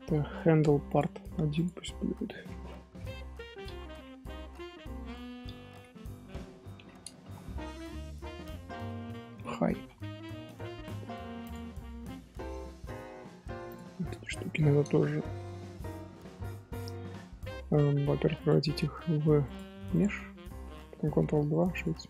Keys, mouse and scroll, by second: 0.8 click, 1.5-4.6 drag, 11.4 click, 11.6 scroll down 2, 12.5 alt+h, 12.9-13.6 middle drag, 13.6 click, 14.1-15.2 middle drag, 15.2 shift+h, 15.4-15.8 middle drag, 15.8 scroll up 1, 16.7-18.3 middle drag, 18.3-20.7 drag, 20.7-21.1 middle drag, 21.1 ctrl+2.